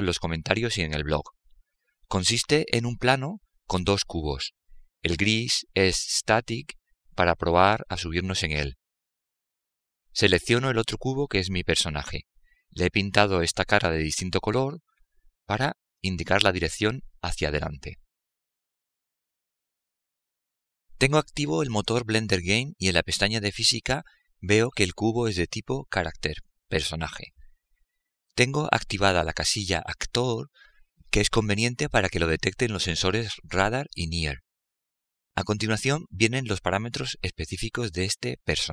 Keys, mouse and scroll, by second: 7.2-9.0 right drag, 14.5-16.4 right drag, 29.8-32.1 drag.